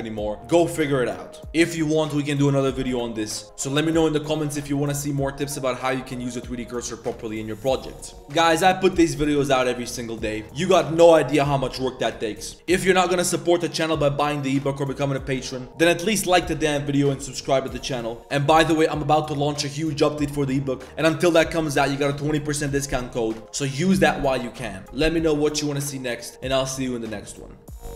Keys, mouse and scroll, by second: 5.8 click, 6.2 middle click, 6.6 middle drag, 8.2 middle click, 12.3 middle click.